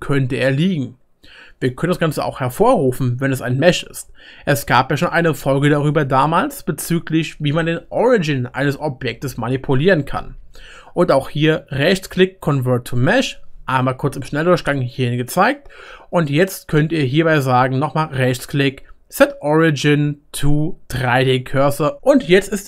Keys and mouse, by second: 3.8 ctrl+z, 4.3-7.3 middle drag, 4.4 ctrl+2, 15.5-17.9 shift+middle drag, 17.9-22.6 right drag.